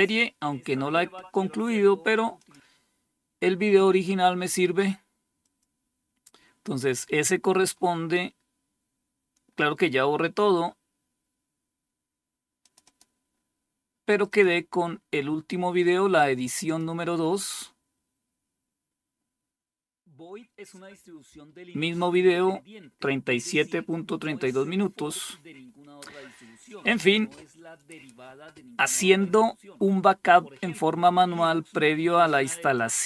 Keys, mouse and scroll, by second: 1.8 click, 4.9 click, 6.7-12.0 scroll down 4, 12.0 click, 13.5 click, 15.9 click, 32.2 click.